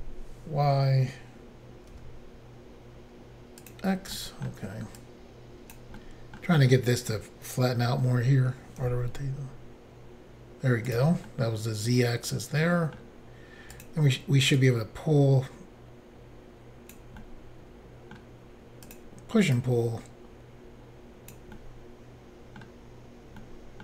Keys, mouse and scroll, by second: 1.9 x, 3.6 click, 3.7 click, 4.2 middle click, 5.0 click, 6.0 middle click, 8.8 typing, 10.9 click, 11.0 click, 11.3 middle click, 13.7 click, 13.8 click, 14.6 click, 17.2 middle click, 18.9 click, 18.9 click, 19.6 click, 21.6 middle click, 23.4 middle click.